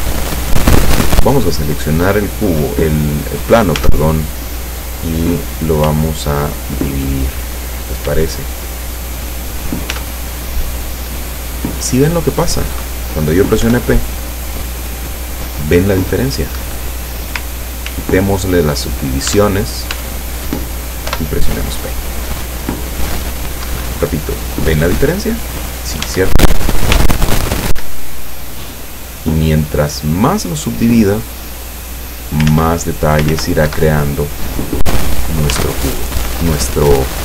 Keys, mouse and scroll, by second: 0.4 right click, 3.9 Tab, 5.9 w, 7.3 click, 8.1 w, 8.8 click, 10.0 Tab, 11.2-11.6 scroll down 2, 11.8-12.3 scroll up 2, 12.5 scroll down 2, 13.7 p, 16.6 Escape, 17.9 ctrl+z, 19.4 ctrl+Tab, 20.0 Tab, 21.2 p, 23.8 Escape, 26.1 Tab, 27.0 w, 27.4 click, 27.8 w, 28.0 click, 32.6 ctrl+z, 33.4 ctrl+z, 33.7 ctrl+Escape, 35.6 Tab.